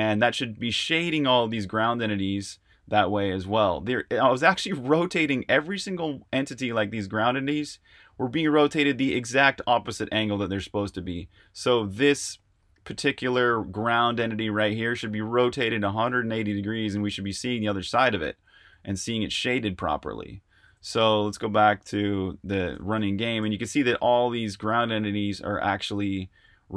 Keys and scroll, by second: 20.6-26.7 typing.